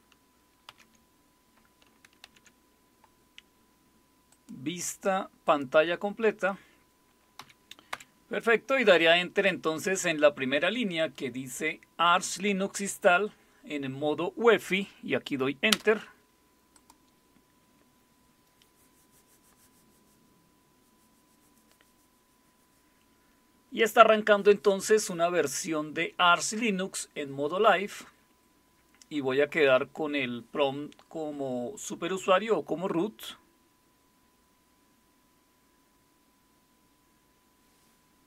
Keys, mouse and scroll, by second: 0.7 super+w, 2.2 super+Right, 4.3-7.4 drag, 7.4 Down, 7.9 Up, 15.7 Return, 16.7-19.4 drag.